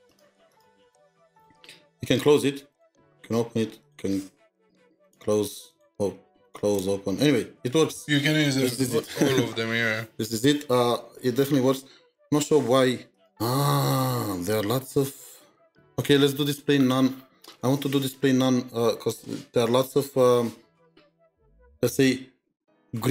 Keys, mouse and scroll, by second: 0.1 double click, 0.5 double click, 0.8 double click, 1.3 double click, 2.0 double click, 2.7 double click, 5.7 double click, 6.5 double click, 6.8 double click.